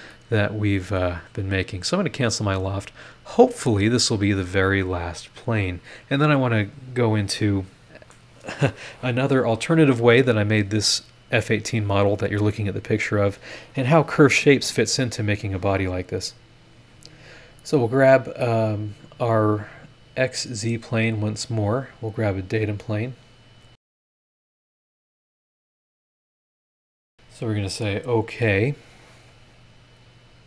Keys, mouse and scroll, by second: 0.1-1.2 middle drag, 0.2 click, 0.2 right click, 1.7 click, 2.6 scroll down 2, 3.1 scroll up 2, 3.5 middle click, 16.2 click, 18.4 click, 20.3-20.7 scroll up 2, 21.5 click, 22.6 click, 24.1 click, 24.4 click, 24.6-27.0 drag, 27.7 click.